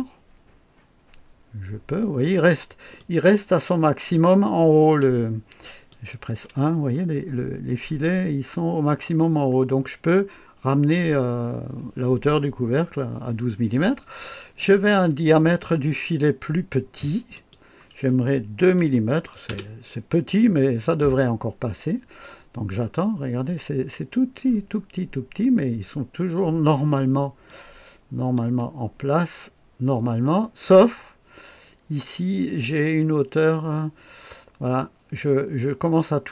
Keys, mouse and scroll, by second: 3.0-6.0 drag, 6.3 KP_1, 6.9-9.1 scroll up 1, 9.1-11.7 scroll down 1, 17.4 click, 18.8 KP_2, 19.5 Return, 22.8-24.4 scroll up 1, 24.4-25.2 scroll down 1, 25.2-27.5 scroll up 2, 27.5-28.8 right drag, 28.8-36.3 scroll down 2.